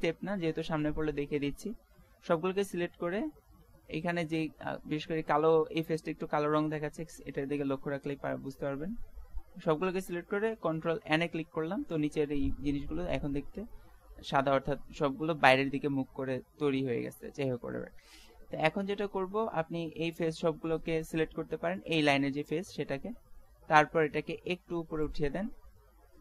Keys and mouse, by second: 3.1-8.8 middle drag, 10.8 ctrl+n, 16.2 middle click, 20.1 click, 20.3-21.7 right drag, 21.7-23.8 middle drag, 25.1-26.2 drag.